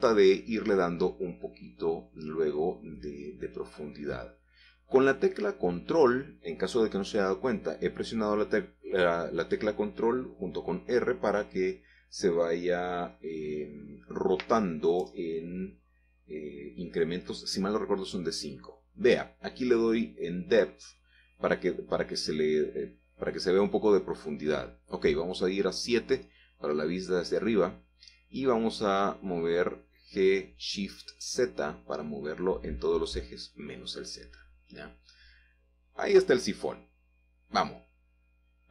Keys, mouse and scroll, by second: 0.3 r, 6.2-7.3 ctrl+drag, 10.3 click, 11.3 Tab, 14.0-15.5 drag, 15.6 click, 16.0-17.2 scroll down 1, 18.1 click, 19.8-21.0 middle drag, 21.1 middle click, 21.4 middle click, 21.5 middle click, 24.0-25.3 middle drag, 26.1 KP_7, 27.4-27.7 scroll up 3, 28.0 shift+middle click, 29.5 g, 30.1 z, 34.2 click, 34.6-35.1 scroll down 2, 37.7 click.